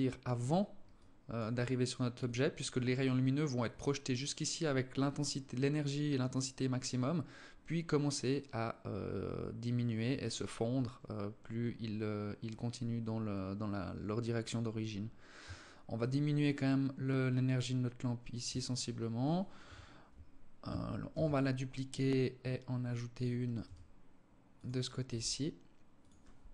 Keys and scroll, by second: 19.0 KP_7, 20.5 shift+d, 23.1 r, 24.5 g, 26.0 KP_3.